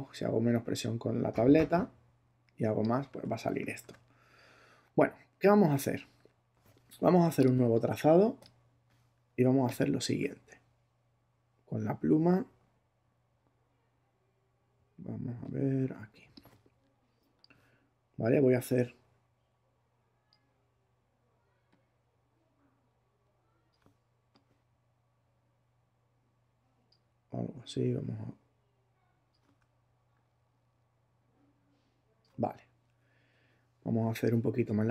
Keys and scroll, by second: 3.1 super+z, 3.6 alt+super+z.